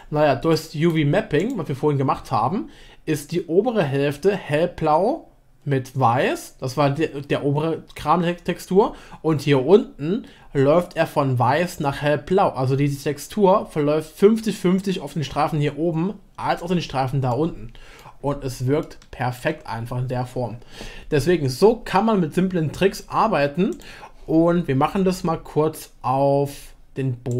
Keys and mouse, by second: 0.5-1.4 middle drag, 1.4 click, 17.3 middle click, 18.8 shift+middle click.